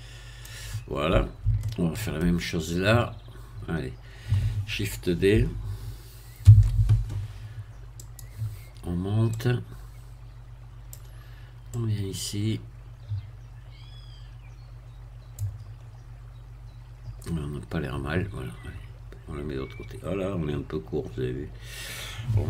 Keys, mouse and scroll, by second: 0.9-1.4 scroll down 1, 1.6 shift+middle click, 2.5-2.9 shift+scroll up 1, 3.5 scroll down 2, 6.5 shift+d, 8.0 click, 9.3-11.1 drag, 11.7-15.5 drag, 15.8-16.6 scroll up 1, 18.3-19.2 scroll down 1, 19.2-22.4 scroll down 1.